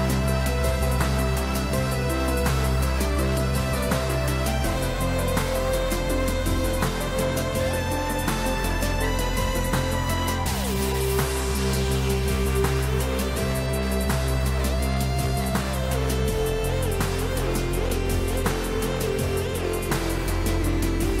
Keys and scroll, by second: 9.8 ctrl+u.